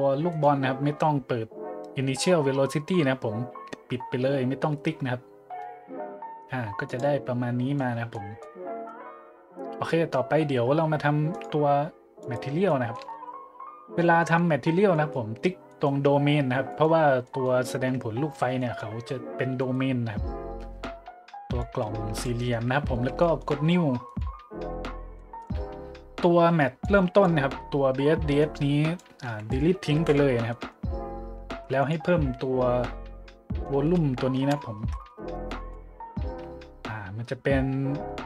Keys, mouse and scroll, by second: 0.3 right click, 6.9 click, 7.8-8.1 middle drag, 8.4-8.8 middle drag, 11.3 click, 12.2 right click, 12.7 middle click, 13.1 shift+z, 14.2-14.5 middle drag, 14.6 middle click, 14.9-15.3 middle drag, 15.4 middle click, 15.7-16.0 middle drag, 16.7 right click, 17.2-17.6 middle drag, 18.6-18.9 middle drag, 19.6 right click, 21.6 click, 22.5 middle click, 23.2 shift+middle click, 24.1-24.4 drag, 24.9 middle click, 25.1 middle click, 25.6 middle drag, 26.8 click, 28.4-29.0 drag, 29.3 click, 30.0 Delete, 30.5-30.8 middle drag, 30.9 middle click, 31.1 middle click, 31.5 shift+a, 31.8 click, 33.3-36.1 typing.